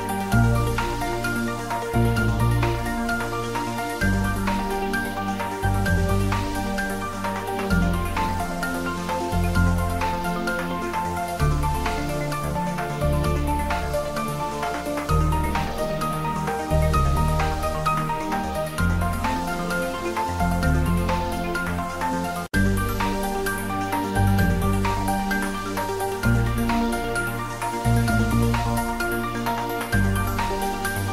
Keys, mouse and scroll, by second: 1.1-2.7 drag, 3.3 click, 4.0 Tab, 4.5 ctrl+middle click, 5.0 ctrl+middle click, 5.9 middle click, 6.6-9.0 middle drag, 9.0 click, 10.7 Tab, 11.5 ctrl+r, 11.7 click, 12.4 Tab, 13.1-15.3 ctrl+middle drag, 15.3 shift+right click, 15.6 a, 16.9 click, 17.7 s, 18.9 click, 19.2 ctrl+middle click, 19.6 s, 20.1 click, 20.3 middle click, 21.1-22.1 typing, 22.4 click, 23.9 shift+middle click, 24.5 ctrl+middle click, 25.2 middle click, 26.4 shift+middle click, 27.3 shift+middle click, 28.3 r, 29.5-31.1 typing.